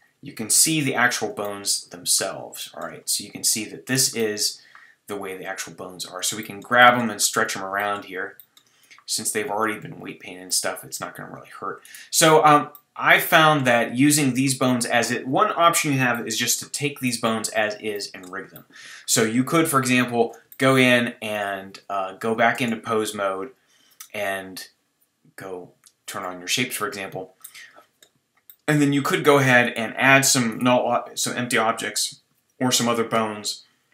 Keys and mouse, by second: 0.5 KP_1, 4.4 click, 5.2 g, 6.0 click, 9.8 click, 11.8-13.6 middle drag, 13.6 click, 14.4 middle click, 17.9 click, 22.5 Tab, 26.1-27.4 drag, 27.4-28.0 middle drag, 29.7-33.6 middle drag.